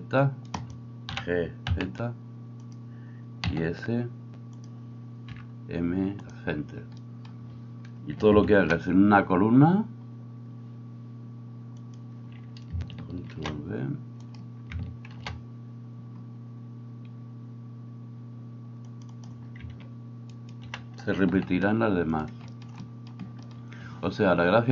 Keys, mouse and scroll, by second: 0.7-19.1 middle drag, 1.1 g, 3.4 s, 5.3 m, 8.6 ctrl+r, 15.1 ctrl+b, 19.1 click, 19.3-20.3 middle drag, 20.3 alt+right click, 20.5-24.7 alt+middle drag, 21.3 s.